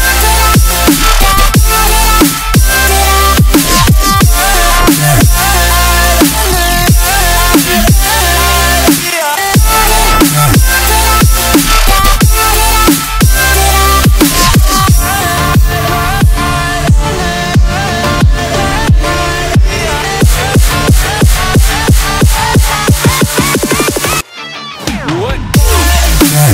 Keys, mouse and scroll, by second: 0.5 click, 1.1 click, 1.6 Tab, 2.1 a, 4.8 3, 5.2 click, 5.8 p, 6.5 Tab, 6.8 Tab, 7.2 click, 8.2 x, 8.8 click, 8.9 x, 9.7 Tab, 10.1 click, 10.2 right click, 10.7 click, 11.5-12.5 drag, 13.0 click, 13.4 KP_0, 14.7 KP_3, 15.6-17.3 right drag, 17.3-18.3 drag, 18.8-21.4 drag, 22.0 click, 23.9 click, 24.1 middle click, 24.9 click, 26.3 click.